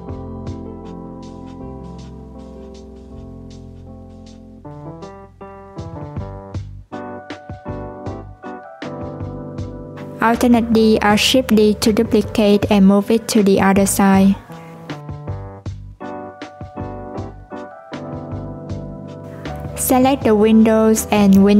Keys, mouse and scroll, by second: 0.2 click, 1.0 click, 3.0 click, 4.1 click, 5.2 click, 6.6 s, 9.2 click, 10.9 alt+d, 18.8 click, 19.9 shift+click.